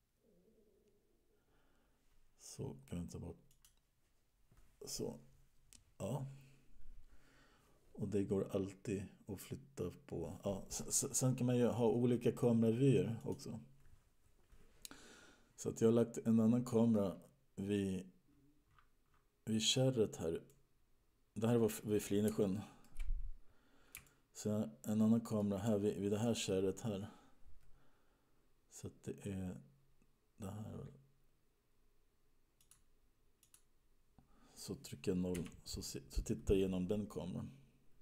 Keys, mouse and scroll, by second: 3.8 click, 14.0 click, 16.2 middle click, 17.4-18.6 scroll down 15, 19.1-20.8 scroll down 19, 20.8 middle click, 22.8 shift+middle click, 24.5 shift+middle click, 32.9 click, 33.6 click, 35.6 KP_0, 37.3-38.0 scroll down 5.